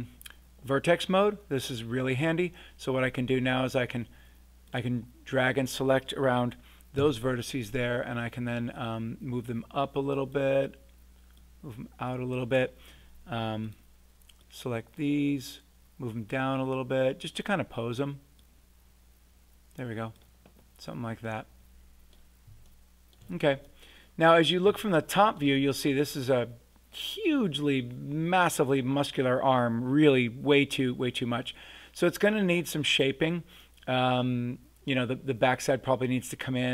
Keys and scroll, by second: 6.9 w.